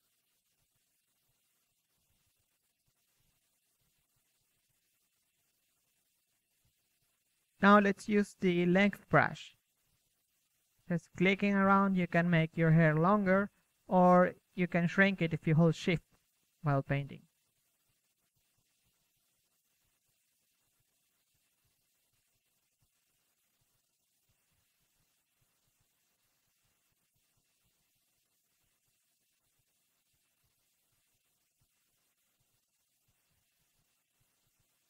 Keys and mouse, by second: 0.5-2.3 drag, 3.0-7.6 drag, 5.8 f, 7.2 KP_1, 7.8 click, 7.8 KP_3, 9.9 f, 11.8 KP_1, 12.7 KP_1, 12.9 drag, 13.1-13.5 middle drag, 13.5-14.1 drag, 15.3 KP_3, 19.0-22.5 drag, 22.7 f, 23.9 f, 24.9 ctrl+z, 25.1 ctrl+z, 25.8 ctrl+f, 26.5 shift+f, 28.5-29.9 drag, 33.8-34.8 drag.